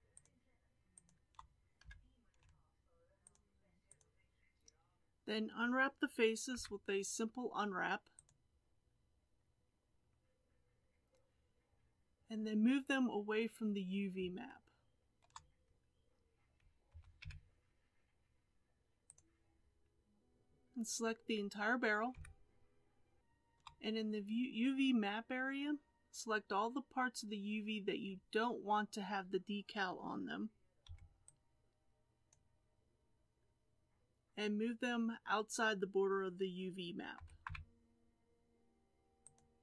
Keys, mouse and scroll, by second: 0.2 shift+click, 1.0 shift+click, 1.8 KP_3, 3.3 shift+click, 4.0 shift+click, 4.5 shift+click, 8.3 u, 16.9 g, 22.1 a, 32.3 b, 37.3 g.